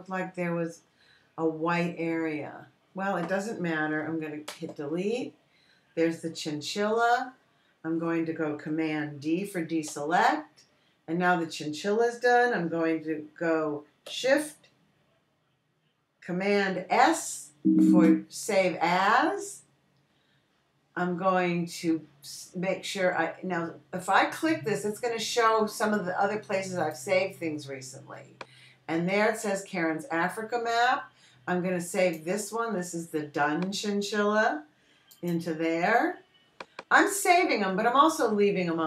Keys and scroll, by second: 5.9 BackSpace, 11.4 super+d, 18.3 shift+super+s.